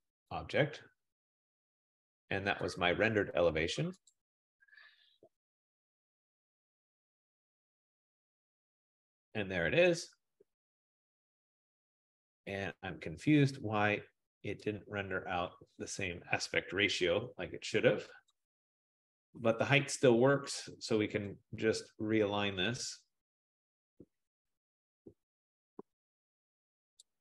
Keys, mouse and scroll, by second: 0.4 click, 2.9 click, 4.2 click, 5.5 F15, 8.0 click, 17.0 click, 18.6 shift+click, 25.9 shift+click, 27.0 shift+click.